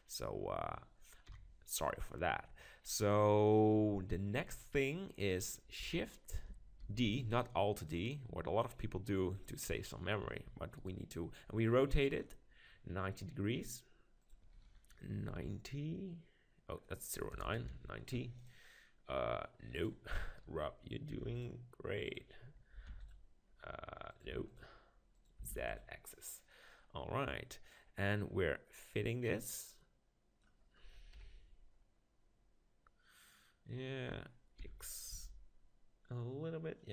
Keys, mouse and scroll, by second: 1.3 KP_7, 1.9-4.4 middle drag, 6.9 shift+d, 7.2-9.2 drag, 7.9-9.0 right drag, 9.2 right click, 10.4 r, 10.9-12.5 right drag, 12.5 click, 12.5-15.8 middle drag, 14.2-16.1 drag, 17.4 BackSpace, 19.7-21.6 drag, 22.0-23.9 drag, 24.1-27.0 drag, 27.6-28.7 middle drag, 28.7-30.5 drag, 31.1 KP_1, 31.8-34.4 middle drag, 34.7 g.